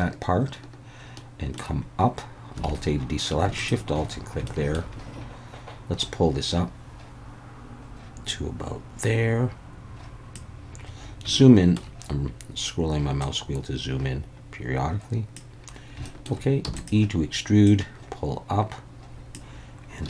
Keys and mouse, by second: 0.0-1.6 shift+middle drag, 2.7 alt+a, 3.6 alt+shift+click, 4.5 shift+middle click, 6.0-10.3 drag, 11.5 shift+middle click, 13.2-15.4 drag, 16.1 shift+middle click, 16.7 w, 16.7 e, 16.7-19.3 drag.